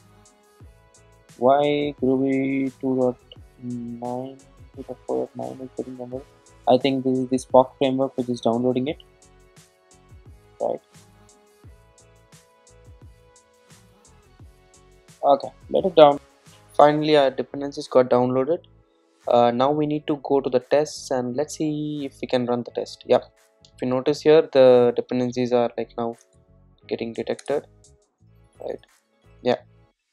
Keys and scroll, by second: 22.3 ctrl+shift+super+F12, 28.3 alt+Return.